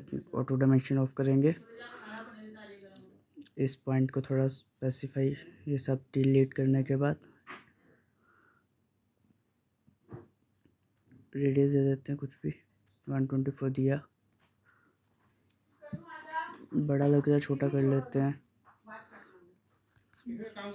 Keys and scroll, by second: 2.2 Escape, 4.1 Delete, 5.2 Delete, 11.4-12.7 typing.